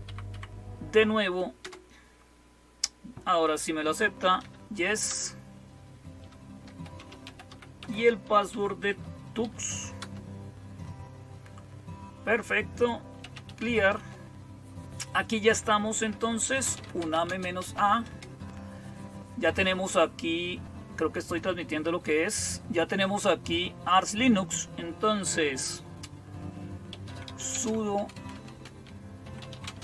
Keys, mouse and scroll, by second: 0.2 Up, 1.5 Return, 3.7-4.8 typing, 4.9 Return, 6.3-9.8 typing, 9.9 Return, 12.8-14.1 typing, 16.2-18.0 typing, 26.5-29.8 typing.